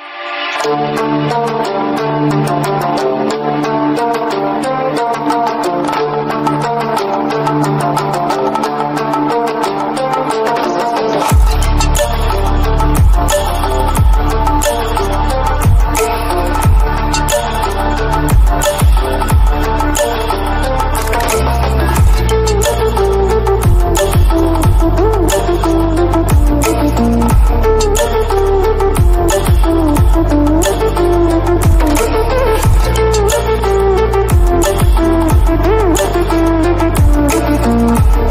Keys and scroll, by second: 0.5 ctrl+-, 5.5 ctrl+=, 20.6 ctrl+-, 21.9 ctrl+j, 26.3 ctrl+-.